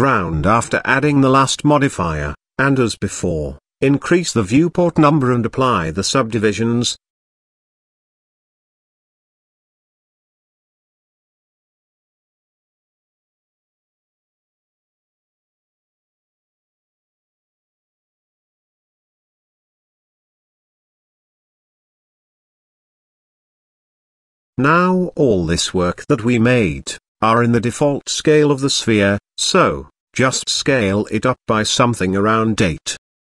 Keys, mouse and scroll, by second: 0.0 click, 2.8 middle click, 3.8 Tab, 5.3 click, 7.2 drag, 7.9-8.3 scroll down 3, 8.3 middle click, 9.0 click, 9.4-9.8 middle drag, 10.3 click, 11.3 s, 14.8 click, 15.3 click, 15.8-16.9 middle drag, 17.1-17.8 shift+middle drag, 18.2-18.5 scroll down 3, 20.0-21.1 scroll down 2, 21.1 click, 21.5 shift+click, 21.9 shift+click, 23.3 n, 24.3 n, 25.2 n, 29.2 click, 30.0 click, 31.2 s, 32.9 KP_8.